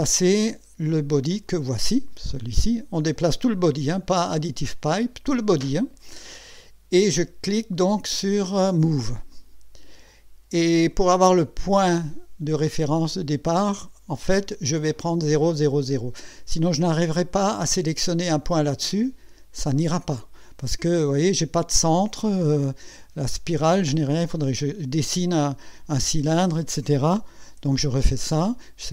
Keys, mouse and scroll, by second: 1.5 click, 9.3 click, 27.4 Escape.